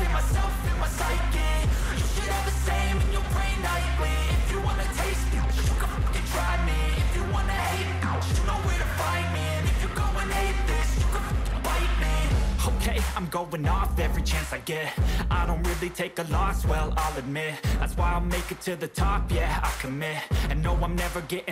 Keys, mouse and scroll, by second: 1.3 double click, 7.5 ctrl+j, 8.4 shift+click, 12.1 right click.